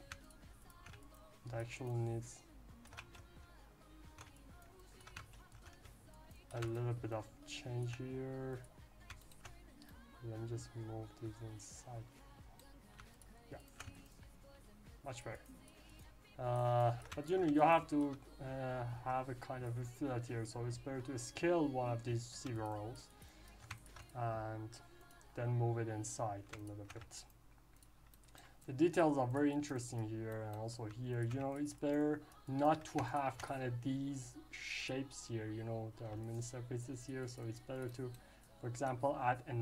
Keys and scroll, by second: 3.1 ctrl+z, 5.3 ctrl+shift+z.